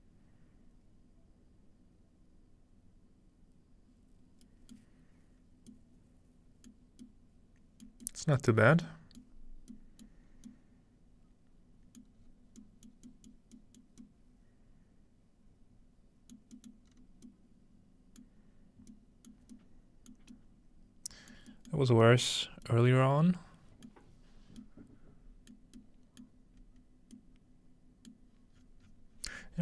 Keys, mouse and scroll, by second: 4.3-4.8 scroll up 2, 4.8 middle click, 6.7-7.0 middle drag, 6.9 scroll down 2, 8.0 middle click, 8.1-8.4 scroll down 1, 8.4 middle click, 8.6-10.3 scroll up 3, 9.2-10.0 middle drag, 10.3 middle click, 10.3-11.5 scroll down 2, 11.5-12.0 scroll down 1, 12.0 middle click, 12.2-13.1 scroll down 2, 13.1 scroll up 2, 13.4 middle click, 16.7 middle click, 16.9-18.1 scroll up 1, 18.6 middle click, 19.3 middle click, 21.3 middle click, 22.2 middle click, 22.5-23.9 scroll up 1, 24.1 middle click, 24.3-25.5 scroll down 1, 25.5 scroll down 1, 26.6-28.0 scroll up 2, 28.0-28.4 scroll up 1, 28.5-29.6 scroll down 5, 28.6-29.6 middle drag.